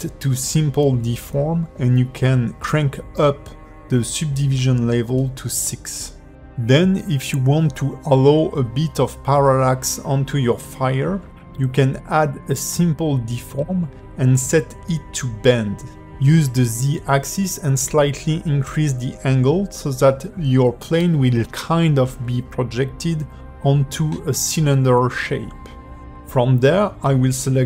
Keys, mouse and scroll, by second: 1.6-1.9 scroll up 3, 2.1 middle click, 2.4 ", 2.9 middle click, 3.4 ", 3.8 middle click, 5.9 click, 7.8 click, 8.1 click, 9.0 click, 10.7 click, 15.8 middle click, 18.7 click, 19.3 middle click, 22.4 click, 23.4 click, 24.1 middle click, 25.6 click.